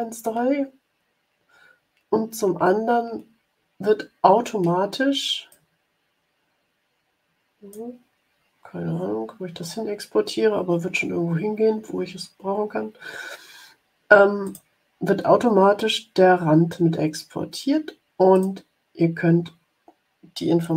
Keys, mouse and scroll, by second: 5.4-8.0 drag, 14.3 click, 18.3 click, 20.5 click.